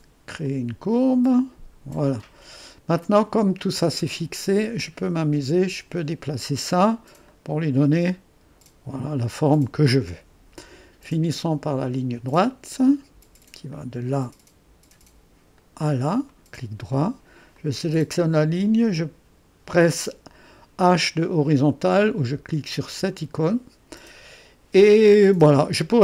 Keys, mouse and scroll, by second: 0.5-7.0 drag, 7.4-10.3 drag, 11.9 click, 13.8 click, 15.6-19.3 drag, 22.9 h.